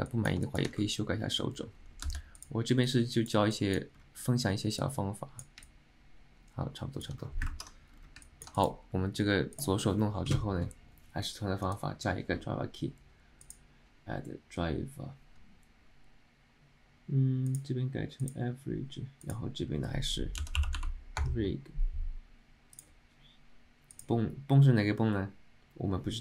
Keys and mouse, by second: 0.2 alt+middle click, 0.6 shift+middle click, 3.0 click, 3.6 click, 4.9 click, 5.8-7.2 alt+middle drag, 7.8 ctrl+Tab, 8.3 middle drag, 8.7 click, 9.6 click.